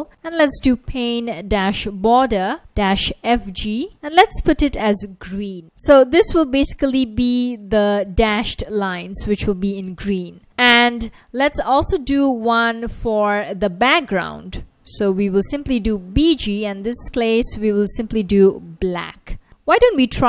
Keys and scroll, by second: 0.0-5.4 typing, 7.2 F1, 10.4 Tab, 10.4 super+v, 14.7-15.7 typing, 17.6-18.9 typing, 19.0 super+s, 19.9 super+Tab.